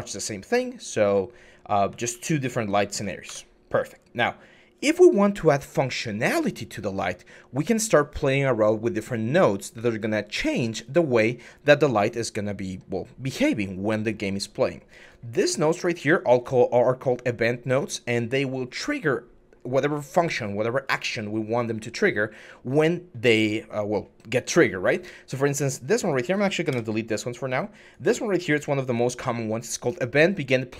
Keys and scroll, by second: 0.0-2.7 typing, 3.1 Escape, 26.5 Delete.